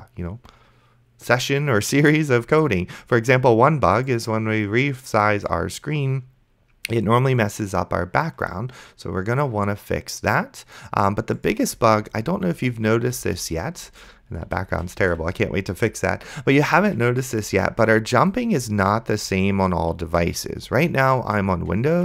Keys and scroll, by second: 12.0 space.